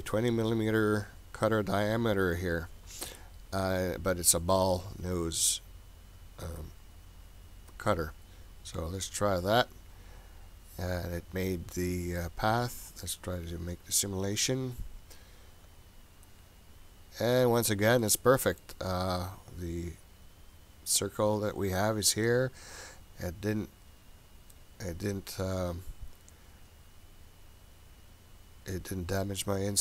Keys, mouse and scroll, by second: 5.1-7.7 scroll up 18, 7.7-9.6 scroll down 1, 9.6 click, 13.7 click, 18.0 middle click, 20.6 click, 24.5-29.0 middle drag.